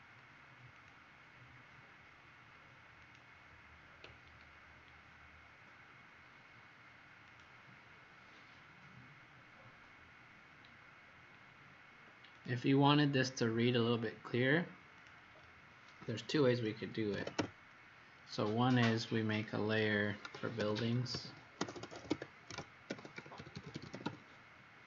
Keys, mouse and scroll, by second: 4.4-5.0 scroll down 3, 7.2 click, 9.3 scroll up 2, 10.8-11.1 scroll down 2, 12.3 click, 16.8-17.8 typing, 19.2 click, 20.3-22.4 typing.